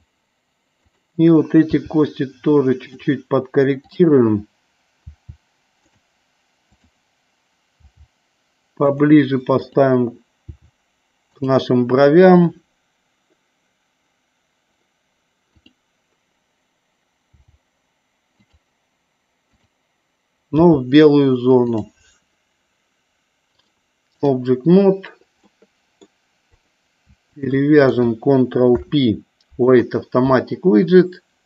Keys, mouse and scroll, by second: 2.9 click, 3.9 click, 5.2 g, 5.9 click, 6.8 click, 7.9 g, 8.9 click, 9.7 click, 11.4 click, 17.5 g, 18.5 click, 19.6 click, 20.6 g, 21.7 click, 23.7 click, 25.7 middle click, 26.6 click, 27.5 shift+click, 28.7 ctrl+p.